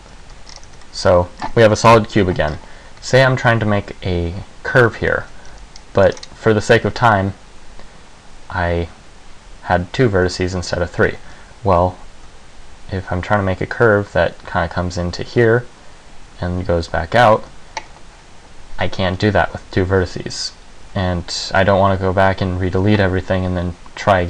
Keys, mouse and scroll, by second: 0.1 right click, 0.3 f, 0.5 Tab, 0.6-1.0 scroll down 4, 0.9 z, 1.0 middle click, 2.1 KP_1, 2.7 scroll up 4, 3.1 Tab, 3.6 z, 5.4 a, 5.7 c, 6.3 click, 10.3 Tab, 10.9 Tab.